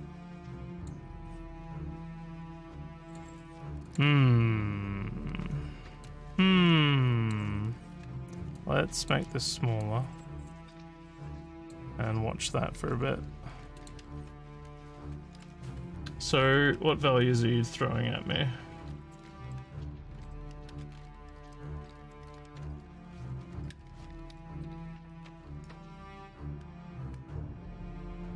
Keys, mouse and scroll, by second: 0.8 click, 3.0 click, 3.9 click, 6.0-7.3 drag, 8.5 click, 9.8-11.7 drag, 13.7 click.